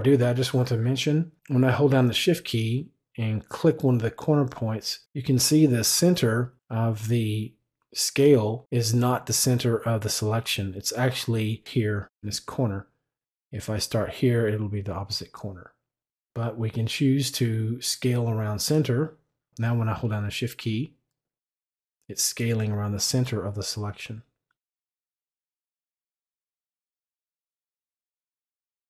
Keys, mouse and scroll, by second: 3.4 shift+click, 17.8 click, 20.5 shift+click, 28.0 click.